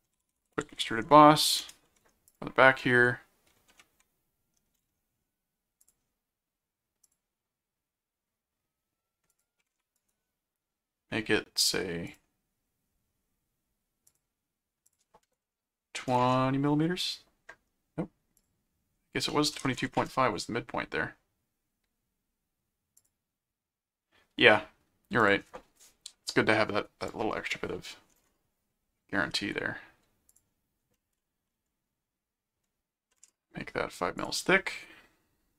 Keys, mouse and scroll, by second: 0.0-1.3 typing, 1.6 Return, 2.3 click, 3.7 ctrl+2, 5.8 click, 7.0 click, 9.3 click, 10.0 right click, 12.1 click, 14.1 click, 14.9 click, 18.4 click, 23.0 click, 25.2 click, 30.3 click, 34.2 click.